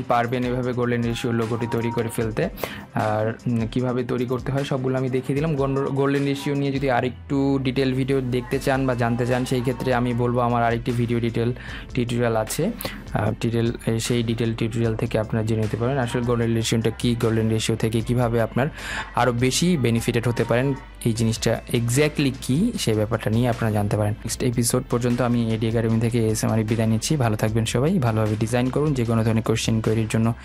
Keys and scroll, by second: 3.3 ctrl+z.